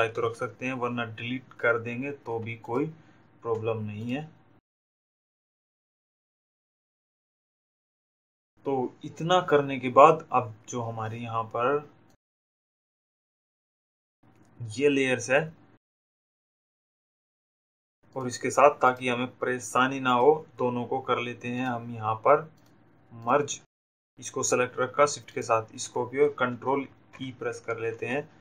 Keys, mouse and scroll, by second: 3.3 shift+click, 5.2 shift+click, 6.0 Delete, 9.7 click, 11.6 click, 12.8 Delete, 15.5 click, 16.2 click, 17.4 click, 21.5 click, 24.8 shift+click.